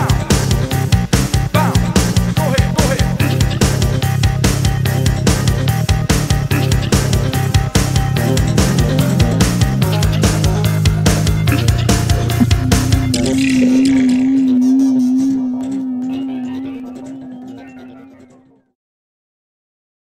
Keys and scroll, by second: 4.2 super+f, 7.9 super+e, 11.7 super+w, 19.8 super+q.